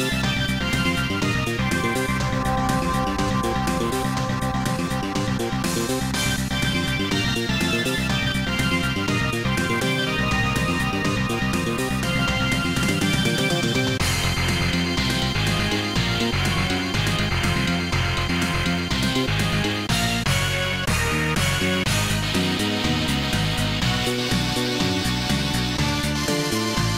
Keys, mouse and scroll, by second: 0.1 click, 0.7 click, 1.2-1.9 typing, 4.9 Return, 5.9 Tab, 7.1 click.